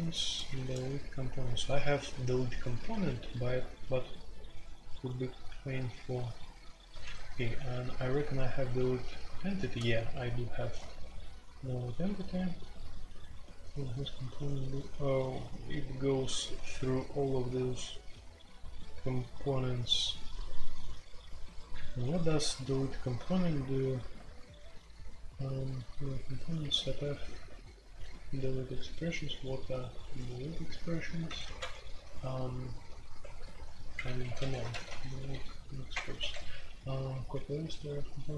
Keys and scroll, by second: 0.0-1.4 typing, 7.0 ctrl+u, 7.5 ctrl+u, 9.1 ctrl+u, 9.7-12.2 typing, 11.9 ctrl+u, 13.5 j, 13.7 j, 14.3 j, 15.4-16.3 l, 18.6 typing, 22.0 ctrl+d, 22.7 ctrl+d, 23.2 ctrl+d, 24.1 ctrl+d, 24.9-28.1 typing, 30.0 typing, 30.7 alt+p, 31.2 alt+p, 31.4 alt+p, 31.4-32.2 typing, 33.7-38.3 typing, 35.9 Return.